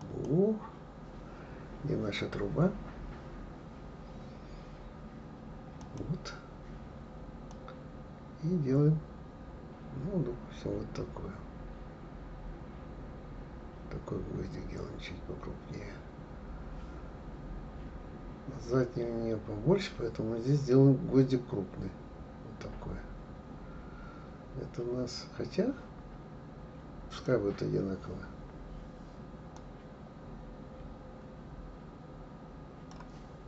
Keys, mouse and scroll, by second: 5.8 click, 7.5-10.5 drag, 29.5-32.5 drag.